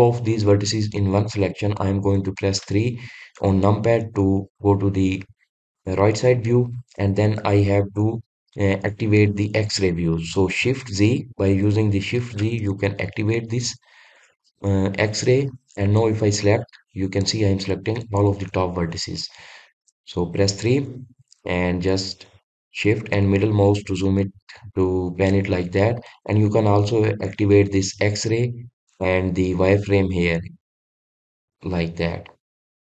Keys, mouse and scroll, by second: 2.5 KP_3, 12.3 shift+z, 15.9 click, 16.6-24.7 middle drag, 26.0 click, 30.6 click, 31.0-31.5 drag, 32.6 click.